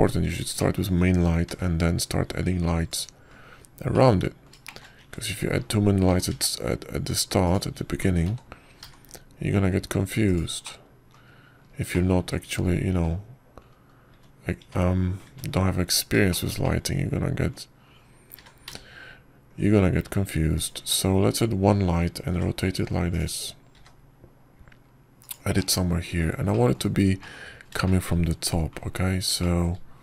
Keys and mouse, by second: 1.0 shift+middle drag, 1.7 shift+click, 3.4 g, 5.8-6.3 drag, 6.3 shift+middle click, 7.9 s, 10.1 s, 12.5 click, 13.8 click, 14.1 `, 14.8 `, 16.0 `, 16.5 `, 17.1 `, 18.5-19.4 drag, 20.4 r, 22.7 `, 24.2 r, 25.6 g, 27.4 click, 28.4 click, 29.1 click, 29.7 shift+middle click.